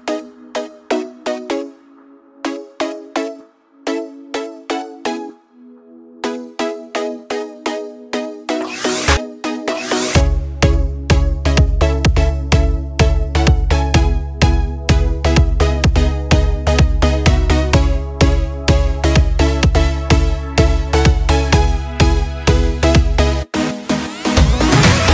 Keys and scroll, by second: 15.1 ctrl+d, 19.0 ctrl+t.